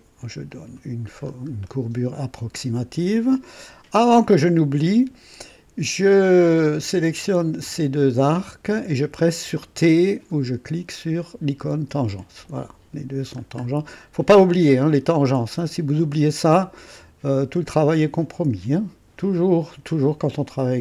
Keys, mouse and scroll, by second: 0.4 click, 1.2 scroll up 1, 1.6 right click, 2.4 scroll up 1, 3.5 right click, 6.5 click, 8.4 click, 11.7 typing, 13.3 scroll down 1, 13.7 right click, 15.9-19.2 drag, 19.5 scroll down 1, 20.0-20.8 right drag.